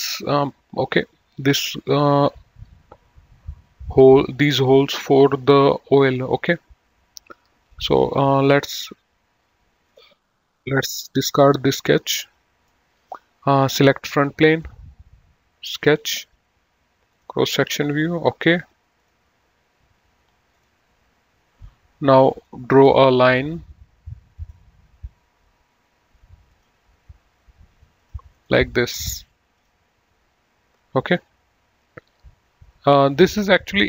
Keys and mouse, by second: 7.9 click, 10.1 click, 12.9 middle click, 14.6 click, 16.1 click, 17.4 click, 19.2 click, 20.7 click, 22.7 click, 24.7 click, 26.7 click, 28.0 click, 28.6 right click, 29.1 click.